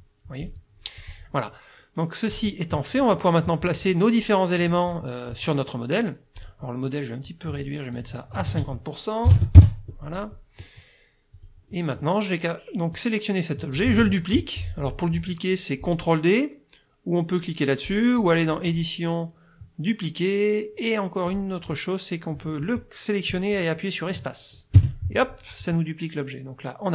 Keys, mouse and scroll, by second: 0.4 click, 2.3 click, 3.2 click, 6.4 click, 8.0 click, 8.5 ctrl+a, 9.3 KP_5, 9.4 KP_0, 9.6 KP_Enter, 11.4 click, 11.8 middle click, 13.0-14.0 drag, 14.0 ctrl+z, 18.7 click, 21.3 click, 22.6-26.9 drag, 24.8 space.